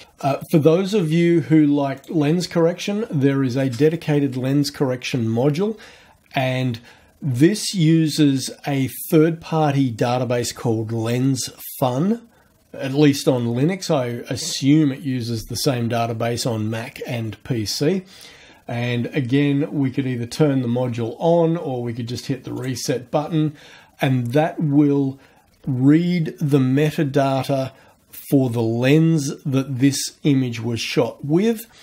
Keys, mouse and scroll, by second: 2.0 click, 22.5 click.